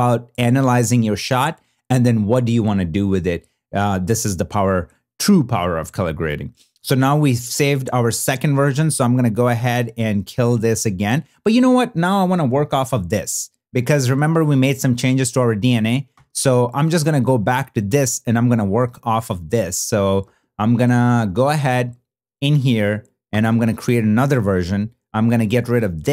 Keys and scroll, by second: 12.9 super+b, 13.9 super+n, 16.1 b, 20.0 n, 21.1 super+b, 23.2 super+y.